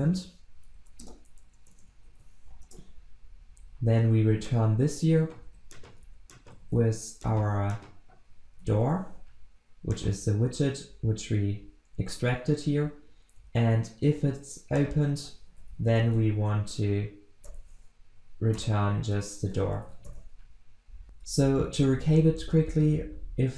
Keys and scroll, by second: 1.0 Return, 5.5 ctrl+x, 6.6 ctrl+v.